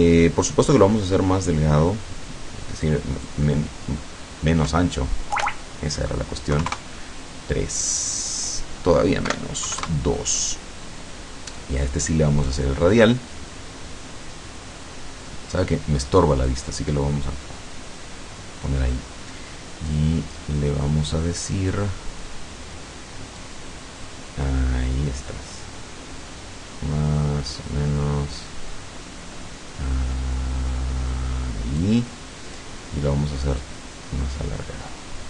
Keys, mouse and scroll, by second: 2.9 click, 4.8 BackSpace, 6.6 KP_3, 6.8 KP_Enter, 9.3 Delete, 9.7 KP_2, 9.9 KP_Enter, 11.6 click, 12.4 click, 15.6-16.7 drag, 20.0 click, 23.4-32.0 drag, 33.6-35.2 drag.